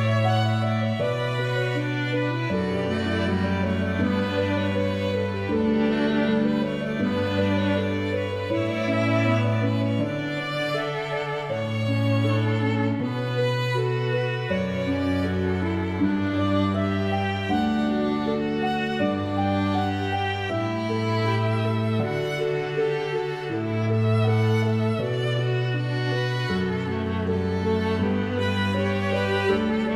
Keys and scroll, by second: 26.6 f.